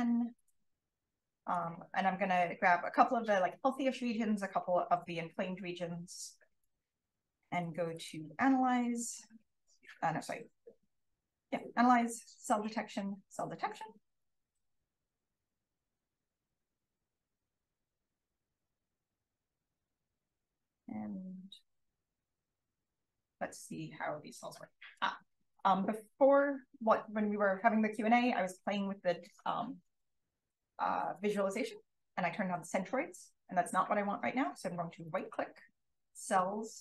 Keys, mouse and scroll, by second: 0.3-1.9 drag, 0.3-1.9 scroll down 1, 1.9-3.1 scroll down 1, 3.1-4.3 scroll down 1, 4.3-7.7 scroll down 1, 7.7-15.9 scroll down 1, 15.9-17.3 scroll down 1, 17.3-18.4 scroll down 1, 18.4-21.5 scroll down 1, 21.5 click, 22.7 click, 28.3-33.8 scroll up 1, 33.8-35.0 scroll up 1, 35.0-36.8 scroll up 1.